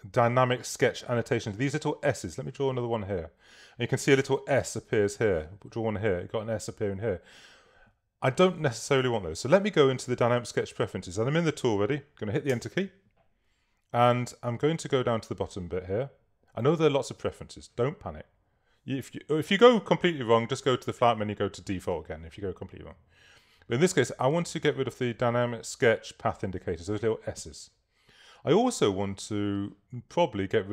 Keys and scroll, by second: 12.5 Return.